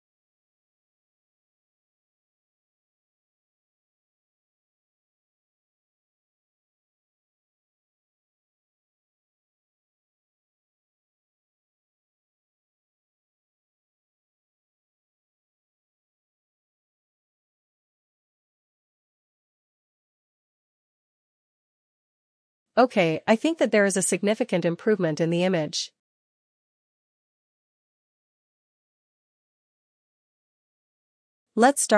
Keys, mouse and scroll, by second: 3.8 click, 6.5 click, 10.9 click, 13.0 click, 14.9 click, 17.1 click, 17.9 click, 19.3 click, 26.7 click.